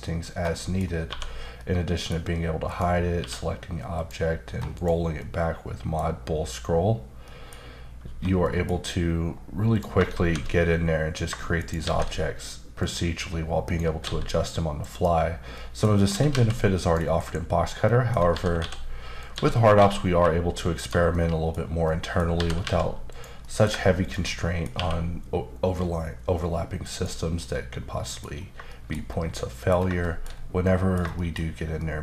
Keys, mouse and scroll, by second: 0.3 scroll down 1, 0.6 middle click, 1.1 1, 1.6 middle click, 2.7 click, 3.2 q, 3.9 click, 4.7 click, 5.2 middle click, 7.3 middle click, 8.1 1, 8.4 middle click, 9.7 click, 10.1 shift+a, 11.6 shift+right click, 11.8 shift+a, 12.8 click, 14.0 s, 14.9 click, 15.5 middle click, 16.1-17.2 typing, 16.8 click, 17.6 scroll down 2, 17.8 middle click, 18.3-19.8 typing, 19.2 click, 20.7 click, 21.1 middle click, 21.8 middle click, 22.3 typing, 23.1 click, 23.4 middle click, 24.0 shift+click, 24.3 middle click, 24.7 q, 26.9 click, 27.4 middle click, 28.3 scroll down 1, 28.7 shift+middle click, 28.9-29.3 scroll down 2, 29.3 middle click, 30.0 shift+middle click, 30.3-30.6 scroll down 1, 30.6 middle click, 31.0 shift+scroll down 1, 31.1 shift+middle click.